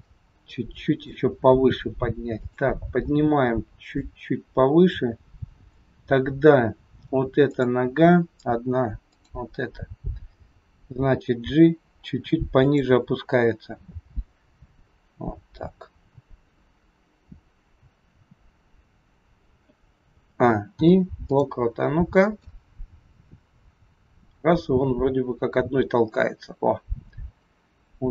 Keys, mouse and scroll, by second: 2.4 click, 6.2 scroll up 2, 7.0-7.4 scroll up 1, 7.4 click, 9.0 click, 10.9 g, 20.1 a, 20.7 i, 22.3 click.